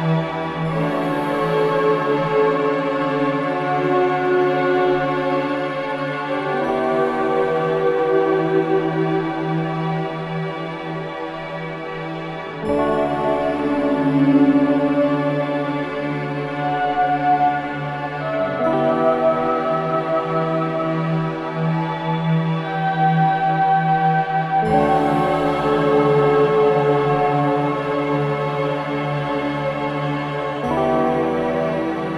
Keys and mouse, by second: 0.3-2.1 drag, 1.7 typing, 3.5-4.9 drag, 4.9 typing, 5.5-6.5 drag, 6.3-7.0 typing, 8.2-9.5 drag, 8.8-9.5 typing, 9.6 click, 12.8 click, 13.4 g, 14.6 click, 15.4-16.7 drag, 16.7 Tab, 17.7-19.3 drag, 19.6 click, 20.9 click, 24.8 click, 25.2 click, 26.4 click, 27.4 click, 28.1 click, 29.2-30.0 typing, 29.3 middle click, 30.3 Return, 31.3-32.1 ctrl+alt+drag.